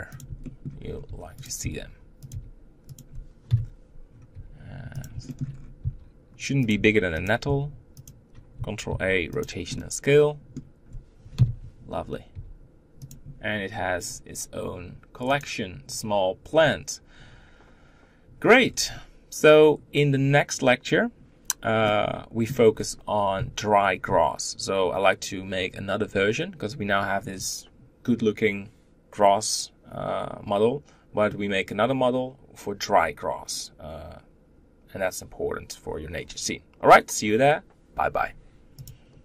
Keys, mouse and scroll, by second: 0.2 shift+middle click, 0.6 scroll up 1, 0.8 g, 5.0 shift+middle click, 5.3-5.6 scroll up 2, 5.6 s, 9.5-11.1 middle drag, 11.1 KP_7, 12.1 g, 15.6 click, 16.2-18.4 scroll down 4, 18.4-21.4 scroll down 1, 21.4 scroll down 1, 21.6 middle click, 22.5-26.7 scroll up 4.